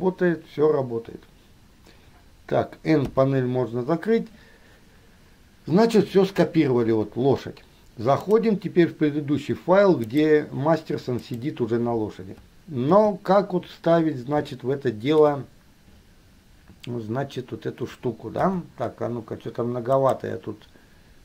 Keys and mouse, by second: 3.3 n, 8.4-9.3 drag, 13.1 KP_3, 14.8-15.5 shift+middle drag, 18.6 n, 20.0 click.